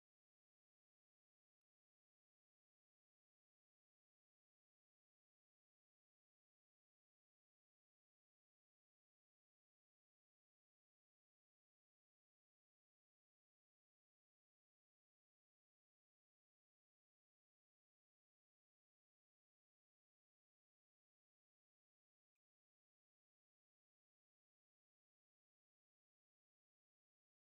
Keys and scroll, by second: 0.0 ctrl+z, 1.0 v, 2.7 ctrl+d, 2.9 x, 4.0 Delete, 4.3 ctrl+z, 4.5 Delete, 5.3-6.7 typing, 7.3 ctrl+d, 10.0 x, 10.9 Delete, 11.5 l, 12.1 v, 13.7-15.4 typing, 18.0-18.8 typing, 21.7 ctrl+d, 22.1 Caps_Lock, 22.5 typing, 24.7 ctrl+d, 25.0-27.2 typing.